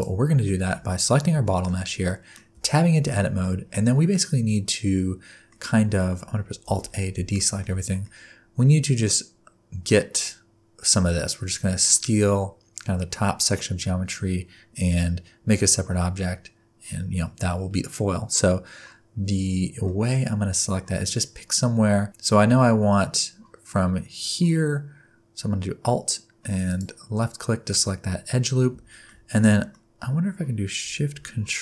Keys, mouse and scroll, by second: 0.0 click, 0.0 scroll down 1, 0.4 shift+middle click, 1.4 shift+middle click, 2.0 middle click, 2.6 Tab, 3.2 shift+middle click, 3.5-4.2 scroll up 5, 4.2 middle click, 6.6 alt+a, 7.3 shift+middle click, 8.0 middle click, 11.5 middle click, 18.0-19.4 scroll up 5, 19.4-19.8 scroll down 2, 19.8 middle click, 21.4 scroll down 1, 21.5 scroll up 1, 21.6 middle click, 22.4-24.0 scroll up 4, 26.6 alt+click, 28.5 scroll down 1, 28.9 shift+middle click, 29.7 middle click, 30.0-30.8 scroll down 2, 30.8 scroll down 1.